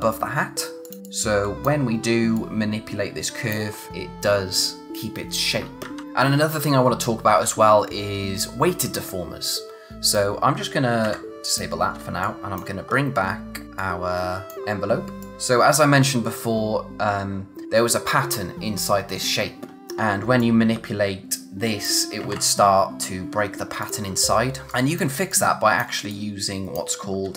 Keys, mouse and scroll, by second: 0.1 click, 5.6 ctrl+Num_Lock, 5.8 ctrl+z, 6.0 click, 9.6 click, 11.1 d, 11.5 click, 11.9 scroll down 1, 12.0 space, 12.2 click, 12.5 space, 12.9 scroll up 1, 13.8 click, 14.3-15.3 typing, 14.7 scroll down 1, 15.2 click, 20.4 click, 22.2 ctrl+z, 23.8 click, 24.7 space, 24.7 click, 25.1 space, 25.3 click, 27.2 scroll down 1, 27.3 space.